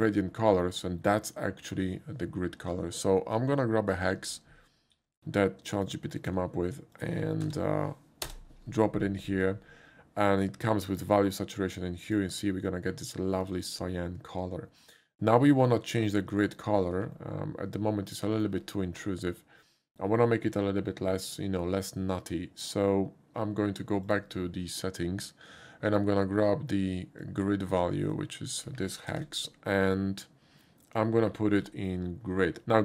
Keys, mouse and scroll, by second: 3.4 click, 4.9 ctrl+c, 5.8 ctrl+click, 6.2 ctrl+click, 6.9 ctrl+click, 7.4 ctrl+v, 8.2 Return, 12.0 click, 13.4 click, 16.1-16.5 shift+middle drag, 17.1-18.4 ctrl+middle drag, 24.0 click, 27.2 click, 28.1 click, 29.1 ctrl+c.